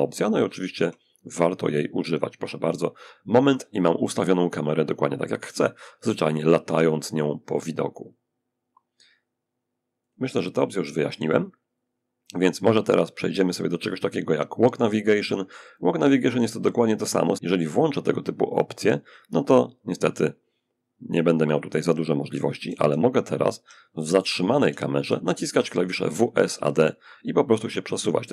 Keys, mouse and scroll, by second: 0.9 click, 9.3 click, 14.8 click, 18.3 click, 21.7-23.1 typing, 24.4-26.1 typing.